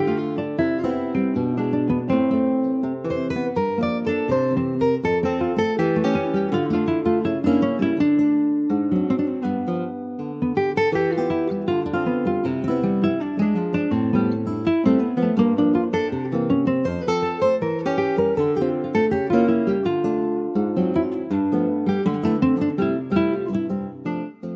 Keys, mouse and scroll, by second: 0.1 ctrl+s, 0.1 click, 0.4 scroll up 2, 0.7 click, 0.8 Tab, 1.3 middle click, 1.7 alt+z, 2.2 alt+middle click, 2.4 alt+scroll up 1, 2.6 alt+middle click, 3.3-3.6 scroll up 1, 3.6 shift+middle click, 4.0-4.8 shift+scroll up 1, 4.8 ctrl+r, 6.0 click, 7.2 click, 9.5-10.3 scroll up 1, 10.3 alt+shift+click, 11.7 ctrl+b, 20.3 ctrl+r, 22.4 1, 22.7 click, 23.7 click.